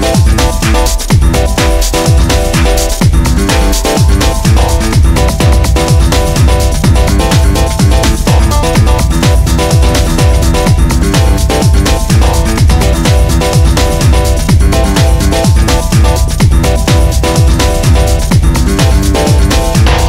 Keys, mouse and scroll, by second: 0.2-0.8 scroll up 3, 0.5 ctrl+s, 0.8-2.0 drag, 2.0 e, 4.2 click, 5.0 click, 5.5-5.8 scroll up 2, 5.8 click, 6.1 click, 6.2-6.6 scroll down 1, 6.6 click, 7.4 e, 8.4 click, 8.7 scroll down 2, 9.0-10.0 scroll up 3, 10.0-11.8 drag, 12.0 click, 13.2 shift+click, 14.0 i, 15.7 e, 16.6 s, 18.1 click, 18.6 g.